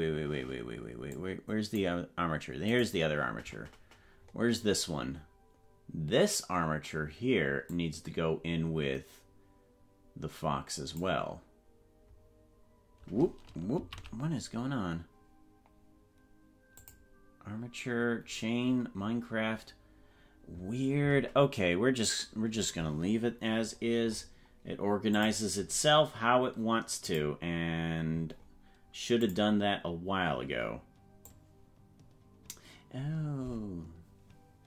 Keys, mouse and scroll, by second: 1.2 click, 2.8 right click, 4.3 scroll up 1, 7.7-11.1 drag, 14.0 ctrl+z, 16.7 click, 18.2-18.6 scroll down 4, 24.1-24.4 scroll up 5, 25.1 click, 27.0 click, 28.3-28.6 scroll down 5, 29.2 click, 31.3-34.6 drag, 33.0-33.5 scroll up 4.